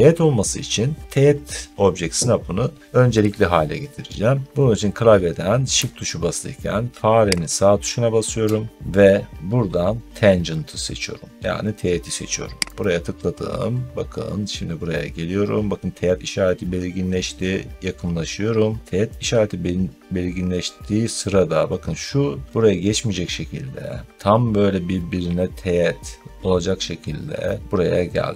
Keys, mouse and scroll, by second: 5.6 click, 7.4 shift+right click, 12.7 click, 16.9 middle click, 17.4 scroll up 2.